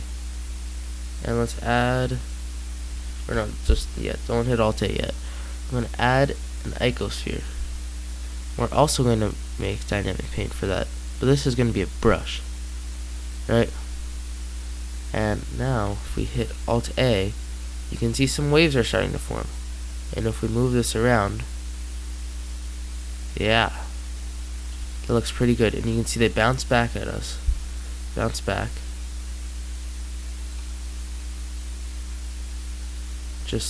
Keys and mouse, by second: 3.2 Escape, 7.0-8.9 drag, 8.9-10.0 middle drag, 10.0-13.4 drag, 13.6-15.9 middle drag, 16.1 alt+a, 16.4 middle click, 17.5 middle click, 29.7-31.2 drag, 32.4 middle click.